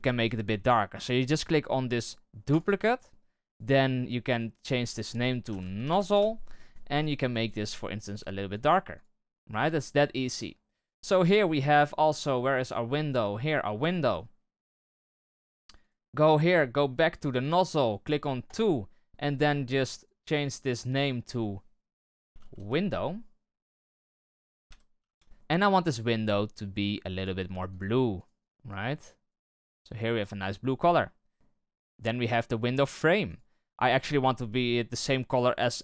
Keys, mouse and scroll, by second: 6.1 z, 8.5 click, 9.5 right click, 11.4-13.4 middle drag, 13.4-13.9 right drag, 13.9-17.4 middle drag, 17.4-25.1 drag, 25.1 BackSpace, 35.4-35.8 drag.